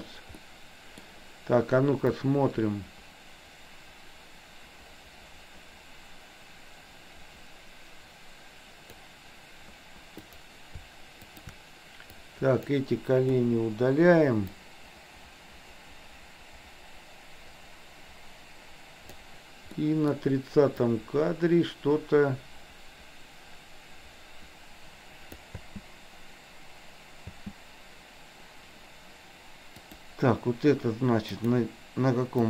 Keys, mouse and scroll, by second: 0.5-1.0 middle drag, 2.2-9.1 drag, 10.2 click, 11.3 shift+click, 12.1-12.7 drag, 13.5 Delete, 14.6-19.3 drag, 19.8 middle click, 21.0-25.5 drag, 25.7 space, 27.3 space, 29.7 click, 31.5 click.